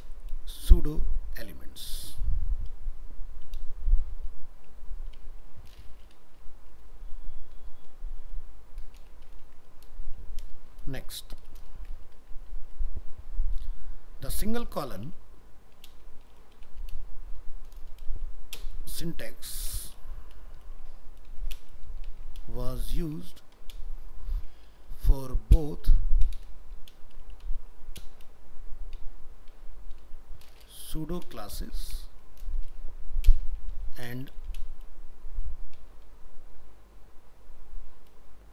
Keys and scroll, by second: 9.5 ctrl+s.